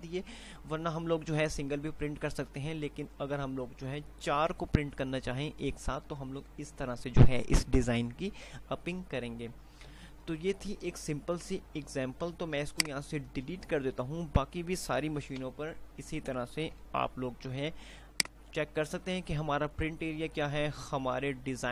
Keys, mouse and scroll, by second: 11.6-15.6 drag, 13.4 typing, 15.6 Delete, 16.9 F3, 17.9 F2, 18.7 click.